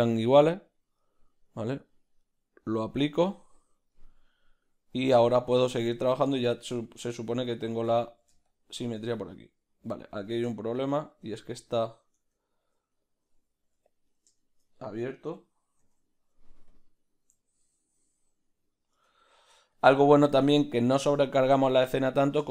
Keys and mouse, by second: 1.9-3.9 drag, 3.9-7.3 middle drag, 5.8 b, 7.4 shift+middle click, 8.1 ctrl+middle click, 8.5 shift+click, 9.2-10.2 middle drag, 10.2 ctrl+z, 10.5-12.4 shift+middle drag, 12.4 Tab, 13.0 right click, 13.8 1, 14.1-16.9 right drag, 16.9 alt+m, 17.4-22.5 ctrl+middle drag, 19.9 b.